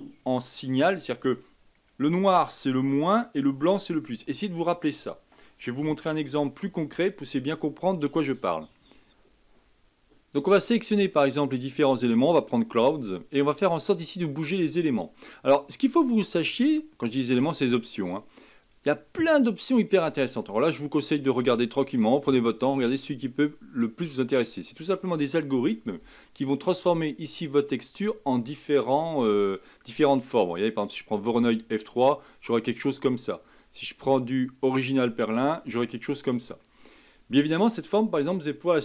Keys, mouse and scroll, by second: 8.1-9.1 drag, 10.7-13.7 drag, 18.5-21.2 drag, 22.1-25.2 drag, 28.2-31.3 drag, 33.4-35.6 drag, 35.6-38.6 middle drag.